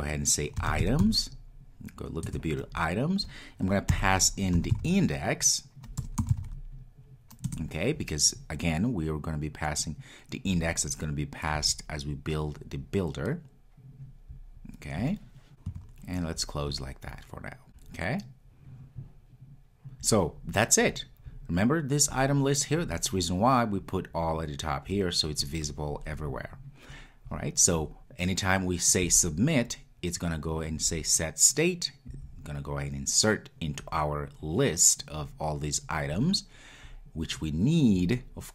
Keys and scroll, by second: 2.3 Return, 7.4 Return.